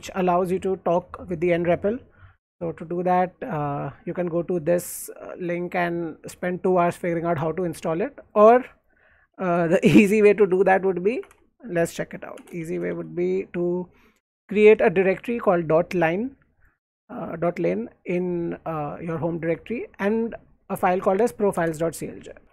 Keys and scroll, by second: 0.8 alt+Tab, 8.4 alt+Tab, 9.4 alt+Right, 10.5 alt+Right, 11.1 ctrl+a, 11.3-13.6 typing, 21.5 Return, 22.4 Escape, 22.4 typing.